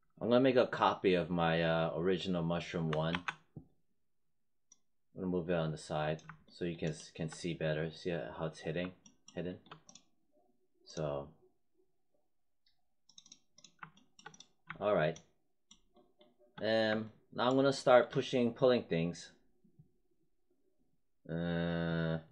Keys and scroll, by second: 3.0 ctrl+d.